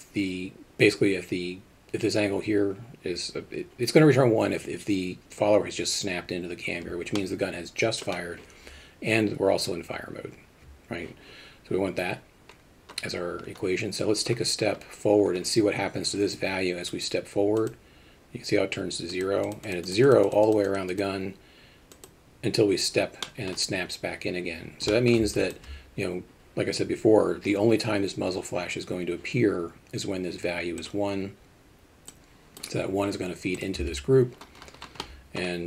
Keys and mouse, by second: 7.2 middle click, 17.7 click, 19.2 click, 19.5 click, 19.7 click, 19.9 click, 20.1 click, 20.3 click, 20.7 click, 23.3 middle drag, 24.9 middle click, 25.4 alt+shift+middle drag, 32.3 click, 33.8 Tab, 35.0 middle click.